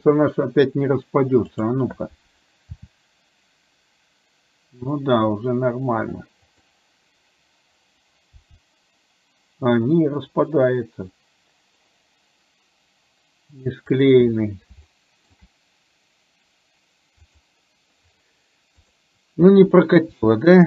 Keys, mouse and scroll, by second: 1.6 click, 2.9 r, 8.5 g, 14.9 shift+middle click, 17.2 click, 18.9 click, 20.2 r.